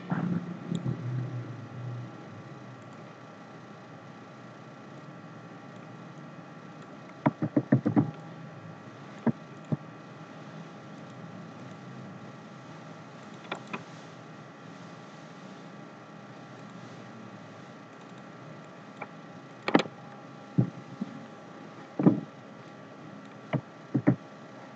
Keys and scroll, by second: 7.6 ctrl+c, 7.9 ctrl+f, 23.9 ctrl+z.